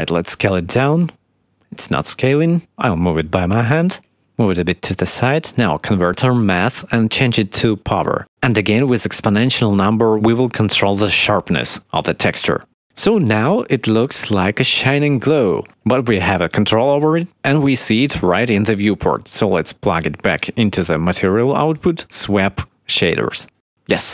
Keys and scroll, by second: 0.8-2.5 typing, 5.4 shift+a.